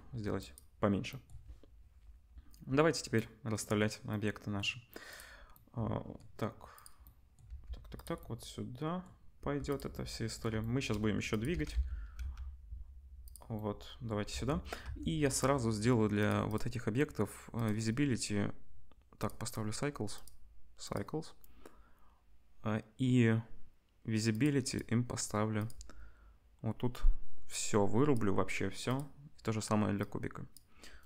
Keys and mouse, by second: 5.1 click, 6.7 click, 6.8-11.3 middle drag, 7.4 g, 9.4 g, 11.3 click, 11.5-14.3 middle drag, 11.5 g, 14.3 Tab, 14.8 Tab, 16.1 click, 17.5-19.3 drag, 19.4 click, 20.2-24.7 drag, 25.5-28.9 drag, 30.0-31.0 drag.